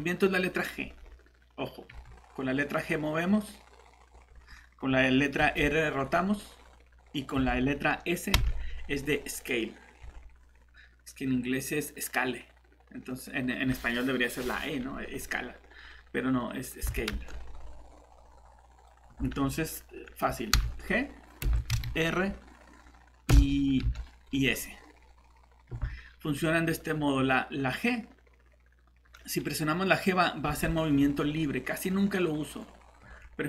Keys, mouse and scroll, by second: 1.9 g, 4.1 Escape, 5.4 r, 7.3 Escape, 8.3 s, 10.0 Escape, 16.8 Escape, 17.1 s, 19.1 Escape, 20.5 g, 21.4 Escape, 21.7 r, 23.3 Escape, 23.8 s, 25.7 Escape, 30.4 g, 33.0 Escape.